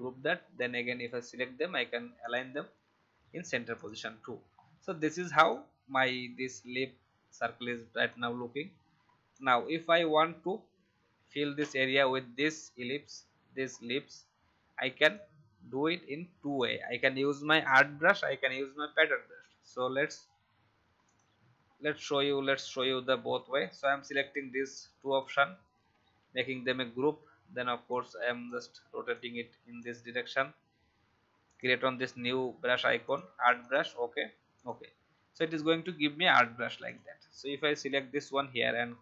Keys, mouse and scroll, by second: 0.6-4.3 drag, 4.5-5.1 alt+scroll down 1, 5.1 click, 8.0 shift+click, 15.1 alt+click, 17.6-25.7 drag, 26.2 ctrl+g, 27.8 shift+click, 29.1-30.2 drag.